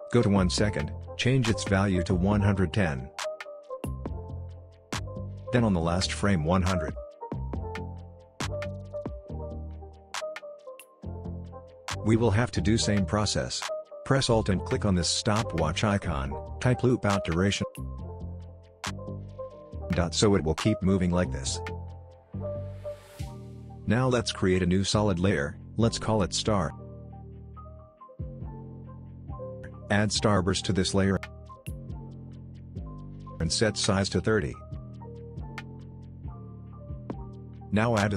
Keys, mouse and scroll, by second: 3.9 Return, 5.3-6.3 drag, 9.9 Return, 11.0 click, 14.9 alt+click, 16.9 typing, 17.3 Down, 18.1 Return, 18.6 space, 18.7-20.5 scroll down 2, 21.6 click, 21.9 right click, 22.6 click, 24.9-26.3 typing, 27.8 Return, 27.9 click, 29.0 typing, 30.1-31.2 typing, 31.7-32.5 click, 32.8-33.2 alt+scroll up 1, 33.3-35.8 drag, 36.2-37.0 scroll down 1, 37.0 right click, 37.4 click.